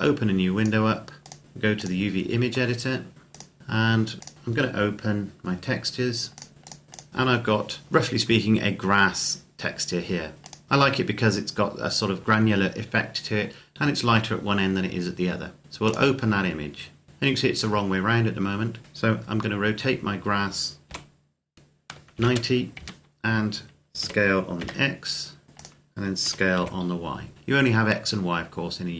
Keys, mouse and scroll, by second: 2.4-3.1 scroll down 1, 3.1 click, 3.6-4.2 scroll up 1, 4.2 click, 6.1 click, 10.3 click, 15.7 click, 20.7 r, 21.9 KP_9, 22.5 KP_Enter, 23.8 s, 24.4 x, 25.4 click, 26.0 s, 26.4 y.